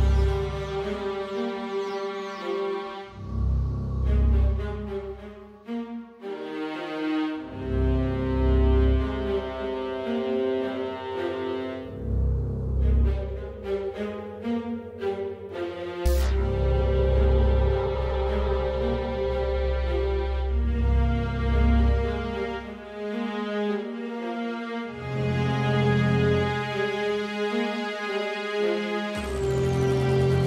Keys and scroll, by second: 5.6-6.5 typing, 9.6 Tab, 10.2-10.9 typing, 12.6-13.3 typing, 14.1 Down, 14.4 Left.